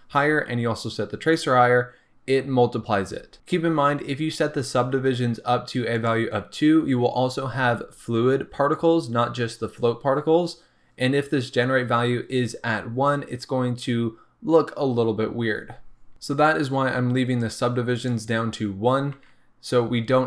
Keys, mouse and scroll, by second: 17.9 click.